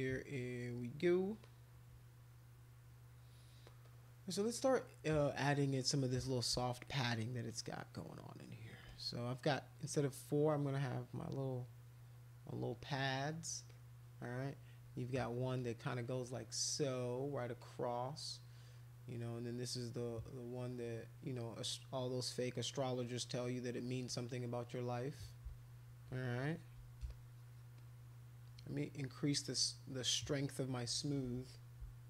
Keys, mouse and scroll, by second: 1.4 click, 3.8-5.3 drag, 6.1 click, 6.9-8.6 shift+drag, 8.9 click, 9.7 click, 10.8 click, 11.6 click, 12.2 click, 12.6 click, 12.7 click, 13.0 click, 13.7 click, 14.8 click, 15.2 click, 15.5 click, 15.9 click, 16.7 click, 17.6 click, 22.0 click, 22.5 click, 23.0 click, 23.3 click, 23.6 click, 23.7 click, 24.0 click, 24.3 click, 24.6 click, 24.8 click, 25.3 click, 25.5 shift+click, 26.0 shift+click, 27.1 shift+click, 27.7 shift+click, 30.4 shift+click.